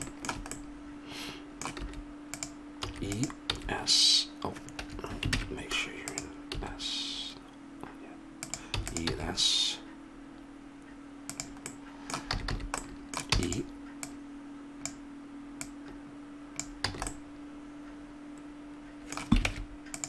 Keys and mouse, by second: 1.9 s, 2.9 e, 3.5 s, 5.4 ctrl+Tab, 6.6 s, 8.7 e, 9.1 s, 12.4 a, 12.6 a, 13.3 e, 17.1 a, 17.2-18.7 middle drag, 19.5 ctrl+Tab.